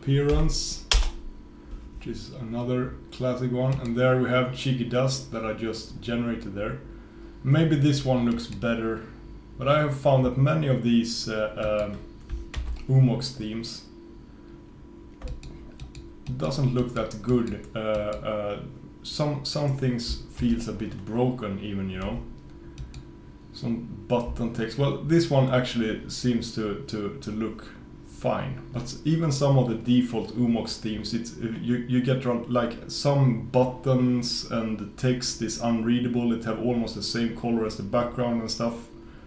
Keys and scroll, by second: 20.5 super+v.